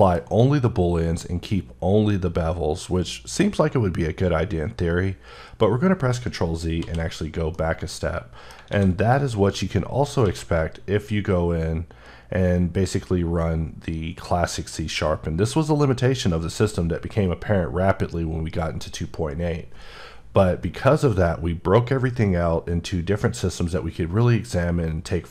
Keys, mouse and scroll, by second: 6.1 ctrl+middle click, 6.6 ctrl+z, 7.3 middle click, 8.5 a, 8.8 click, 10.0 q.